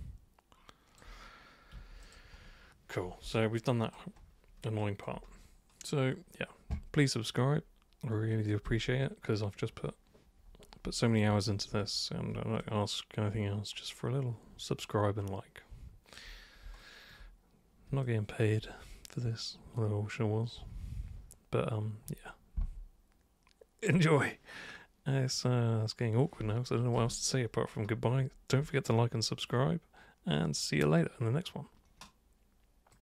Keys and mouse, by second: 1.7 super+3, 2.0 super+click, 3.3-3.9 alt+super+drag, 4.8 alt+super+click, 12.6-16.1 alt+super+drag, 18.1 alt+super+click, 32.9 super+click.